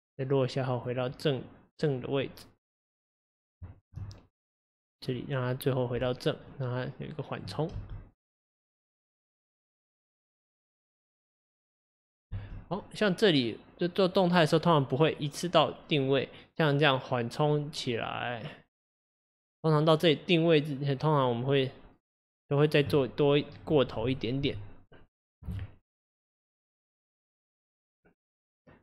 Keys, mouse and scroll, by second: 2.2 click, 3.8 ctrl+z, 4.1-7.7 drag, 7.7 space, 12.4 space, 12.7 click, 24.4 r, 26.3 click.